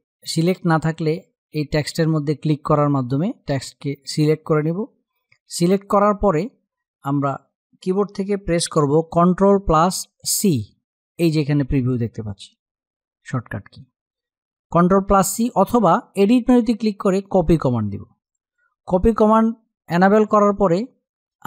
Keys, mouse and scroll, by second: 1.5 click, 9.3 click, 10.2 ctrl+c, 15.8 click.